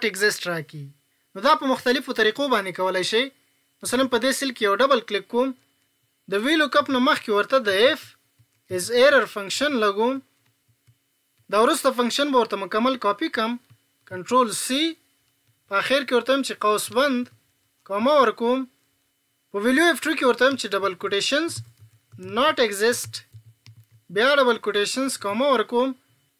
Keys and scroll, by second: 14.1 ctrl+c.